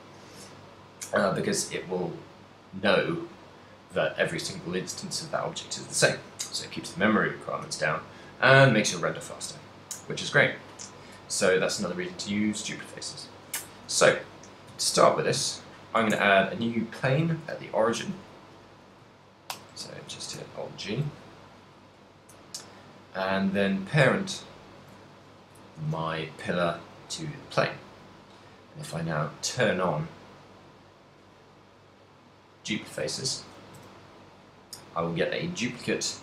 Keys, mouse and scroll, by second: 14.7 KP_7, 15.4 z, 16.2 shift+a, 19.6 alt+g, 20.1 shift+c, 20.6 shift+middle click, 23.6 shift+middle click, 23.6 right click, 24.4 shift+right click, 26.2 ctrl+p, 28.2 right click, 29.0 right click, 30.9 click, 32.8 click, 33.9 z, 34.3 middle click, 35.2 middle click, 35.8 middle click.